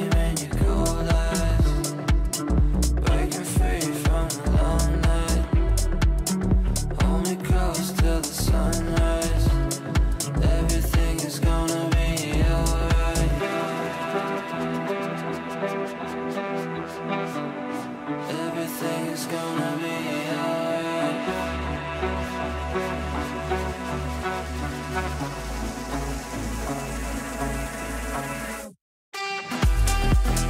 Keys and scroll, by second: 9.1 Delete, 17.7 Delete, 19.2 shift+Page_Up.